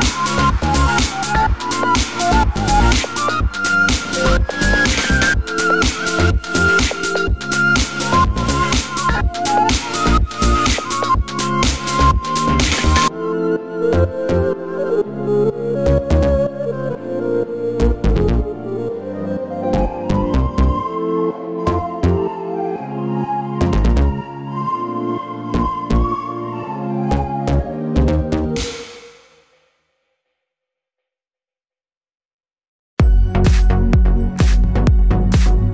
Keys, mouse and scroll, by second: 2.1 middle click, 2.1 click, 3.6 middle click, 3.8 s, 4.3 click, 5.0-14.6 middle drag, 6.3 2, 6.4 click, 6.7 g, 7.7 click, 7.9 Tab, 8.1 scroll down 2, 8.4-9.8 scroll up 2, 14.6 KP_7, 14.9 z, 15.0-16.0 scroll down 1, 16.0 middle click, 16.6 click, 16.8 Tab, 17.0 click, 17.4 3, 17.7 z, 18.0 click, 18.1 shift+click, 18.5 click, 18.9 shift+click, 20.0 middle click, 20.5 scroll up 1, 20.7 2, 20.8 click, 21.1 ctrl+click, 23.0 middle click, 23.2 3, 23.6 shift+click, 23.9 KP_7, 24.2-25.7 shift+middle drag, 25.2 e, 25.7 s, 26.6 click, 26.8 g, 27.8 click, 27.9-33.5 middle drag, 33.8 shift+click, 33.9 e, 34.9 2, 35.0 click, 35.2 g, 35.6 click.